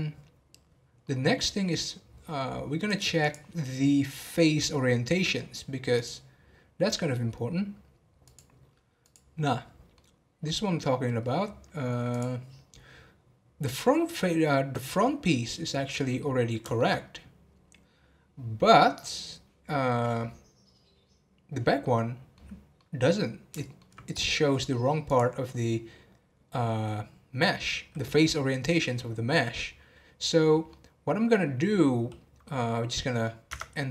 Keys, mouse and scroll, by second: 1.5 scroll down 1, 2.9-9.5 drag, 9.5-11.2 middle drag, 11.2 scroll up 3, 12.1 click, 12.7 scroll down 2, 15.9 scroll up 1, 16.2-25.1 middle drag, 25.1-30.6 drag, 30.6-33.5 middle drag, 33.5 Tab.